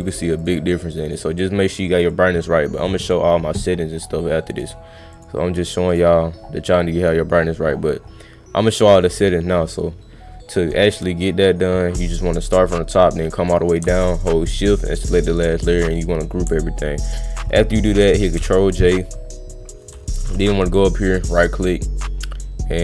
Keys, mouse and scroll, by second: 0.4 click, 2.1 click, 5.1 click, 5.8 click, 9.1 click, 11.2-13.5 drag, 14.9 shift+click, 15.9 click, 20.9 right click.